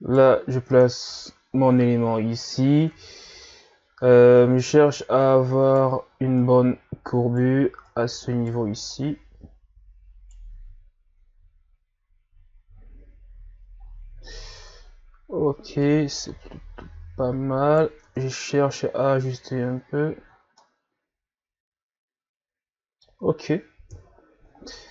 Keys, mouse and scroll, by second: 0.5 scroll down 2, 0.7 Tab, 1.0 a, 2.0-2.7 ctrl+scroll up 4, 2.9 Tab, 5.0 right click, 6.4 right click, 7.8 right click, 8.9 right click, 10.5 Tab, 11.5-12.0 scroll down 2, 12.6 scroll down 2, 13.8-14.3 ctrl+scroll up 3, 14.5 Tab, 15.8 right click, 18.0 Tab, 18.9-19.6 scroll down 4, 19.6-20.0 scroll up 5, 20.3 scroll down 1, 20.6-23.6 middle drag, 23.9 KP_1.